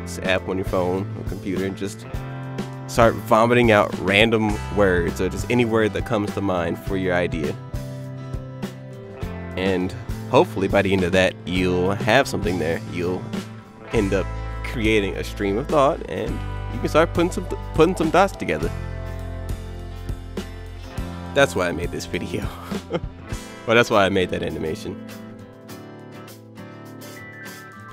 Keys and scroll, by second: 0.4 ctrl+shift+a, 0.6 ctrl+alt+space, 1.9 ctrl+shift+a, 3.5 ctrl+shift+a, 5.2 ctrl+shift+a, 7.3 ctrl+shift+a, 8.6 ctrl+z, 9.0 ctrl+z, 10.1 alt+shift+o, 10.8 ctrl+shift+a, 12.1 ctrl+shift+a, 12.5 ctrl+c, 12.5 ctrl+shift+a, 13.7 ctrl+shift+a, 13.8 ctrl+shift+v, 14.5 ctrl+z, 16.3 ctrl+z, 16.4 ctrl+x, 16.7 ctrl+shift+v, 16.8 ctrl+shift+a, 17.6 ctrl+shift+a, 18.4 ctrl+shift+a, 21.0 alt+j, 23.2 ctrl+shift+a, 23.7 ctrl+z, 23.8 ctrl+shift+a, 25.2 ctrl+shift+a, 26.2 ctrl+b.